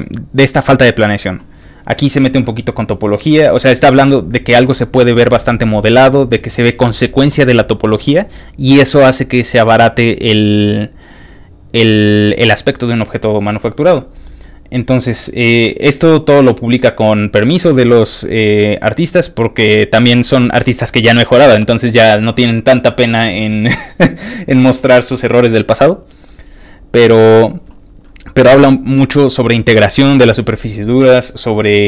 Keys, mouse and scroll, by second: 3.0 ctrl+click, 3.9 ctrl+click, 4.3 ctrl+click, 4.8 ctrl+click, 5.4 ctrl+click, 6.4 ctrl+click, 7.4 ctrl+click, 14.1 ctrl+click, 14.5 ctrl+click, 15.1 ctrl+click, 16.2 ctrl+click, 17.5 ctrl+click, 18.5 ctrl+click, 19.1 ctrl+click, 24.4 ctrl+click, 26.0 ctrl+click, 26.7 ctrl+click, 30.7 ctrl+click.